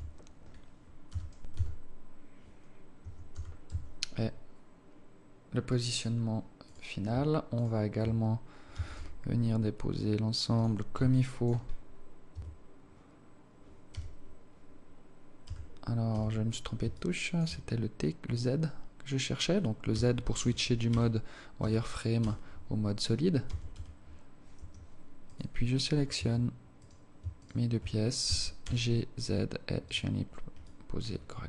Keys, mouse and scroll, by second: 0.1 KP_1, 1.3 g, 3.6 g, 6.9 right click, 7.9 shift+right click, 9.0 g, 11.4 alt+shift+click, 11.9-12.3 scroll up 5, 12.6 Tab, 14.2 t, 15.7 t, 16.4 z, 17.2 alt+shift+click, 20.2-22.5 typing, 23.7 g, 25.5 right click, 26.5 Tab, 27.1 right click, 27.7 shift+right click, 28.5 g, 30.9 alt+click.